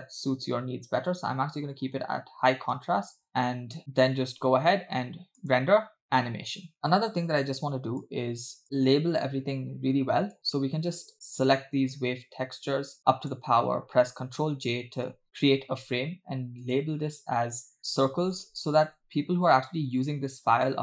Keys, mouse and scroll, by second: 2.8 space, 3.8 space, 4.1 space, 5.4-6.8 drag, 6.8 middle click, 6.8 scroll down 5, 8.0-8.6 drag, 10.4-13.4 drag, 15.2 ctrl+j, 16.6-19.4 drag, 20.7-20.8 drag.